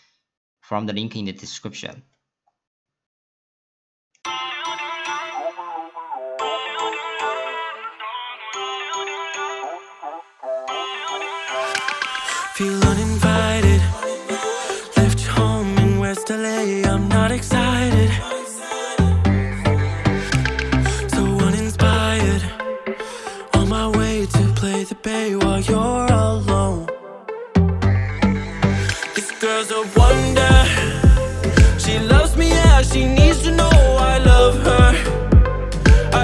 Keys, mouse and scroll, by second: 2.7-4.2 drag, 4.9 ctrl+a, 10.4 scroll down 1, 10.5-11.1 scroll up 1, 11.1 click, 11.8-12.3 middle drag, 12.3 scroll down 2, 12.5-12.9 scroll up 1, 12.9-13.5 scroll down 2, 13.5 middle click, 14.2 ctrl+a, 19.4 BackSpace, 19.5 BackSpace, 22.8 click, 23.1 click, 23.4 w, 26.9 middle click, 27.6 click, 28.0 click, 28.6 click, 28.7 ctrl+a, 32.1 click, 33.5-34.4 middle drag, 34.4 click.